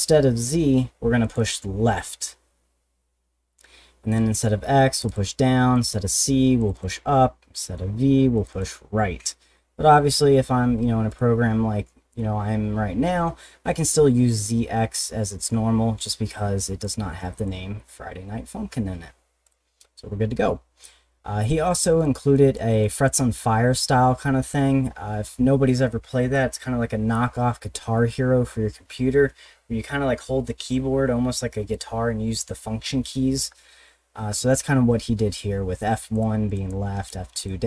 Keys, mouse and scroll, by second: 1.2 click, 4.2 click, 4.9 click, 5.1 click, 5.7 click, 6.6 click, 6.7 click, 7.6 click, 8.4 click, 8.5 click, 11.1 click, 16.8 click, 19.4 click, 22.0 click, 22.8 click, 34.9 scroll down 1, 36.1 click, 36.5 click, 37.0 click, 37.4 click.